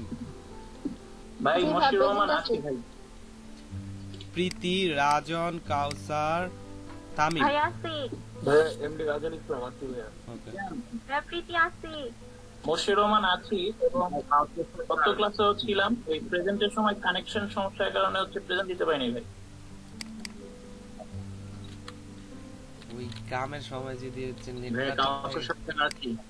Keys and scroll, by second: 21.7 BackSpace, 24.3 p.